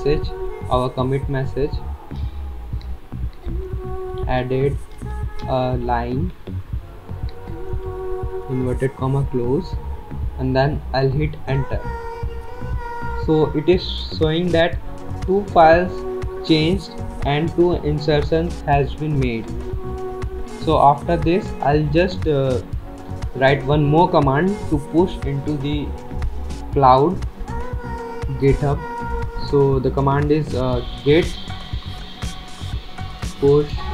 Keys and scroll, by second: 2.4-6.6 typing, 8.0 typing, 11.6 Return, 30.8-31.3 typing, 32.7-33.9 typing.